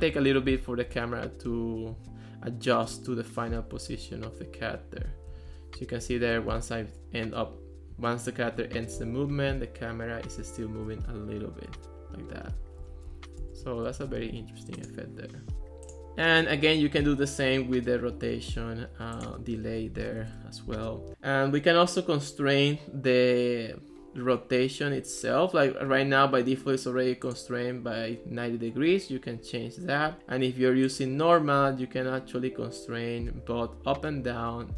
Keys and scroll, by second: 0.5 a, 0.9 w, 1.6 d, 2.1 a, 3.8 w, 5.1-7.1 typing, 9.0 s, 9.4 d, 10.5 w, 11.8 a, 13.2-14.8 typing, 19.8-20.7 typing.